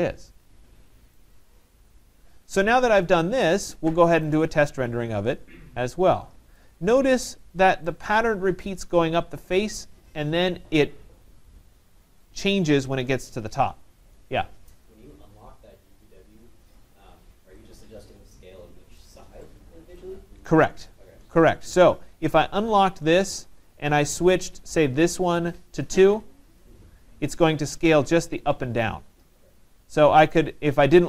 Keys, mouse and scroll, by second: 3.0 right click, 3.4 middle click, 3.5 middle click, 4.3 right click, 4.5 middle click, 4.6 middle click, 5.4 middle click, 6.6 right click, 6.9 middle click, 7.1 middle click, 14.3 right click, 17.3 middle click, 19.0 right click, 19.5 middle click, 20.5 right click, 22.9 click, 24.6 click, 26.0 2, 26.2 Return, 30.4 click.